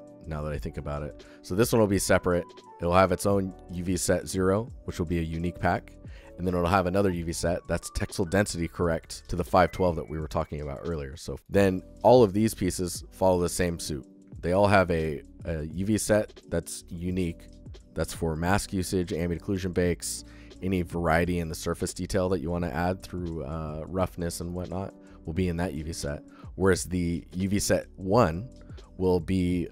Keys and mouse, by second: 9.0 click, 9.2 alt+middle click, 9.9 alt+middle click, 11.8 click, 12.9 shift+click, 14.9 click, 15.6 click, 17.1 click, 29.4 click.